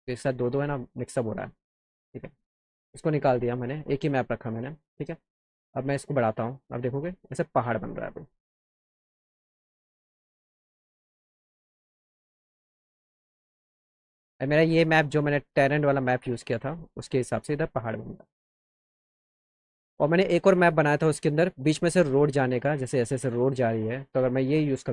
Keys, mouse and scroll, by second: 1.0 alt+middle click, 6.0 click, 9.1-10.3 drag, 19.6 click, 21.6 click, 23.9 click.